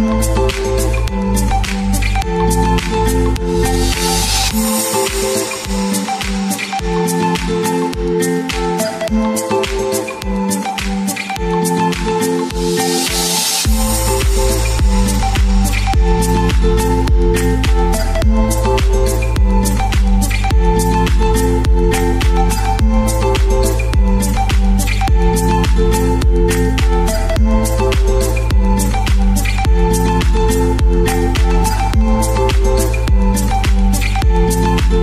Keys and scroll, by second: 2.3 space, 7.8 space, 12.1 shift+Left, 12.2 shift+Left, 12.4 shift+Left, 12.5 shift+Left, 13.9 shift+Left, 19.8 alt+Left, 20.0 alt+Left, 25.0 BackSpace, 26.9-28.1 typing, 31.8 space.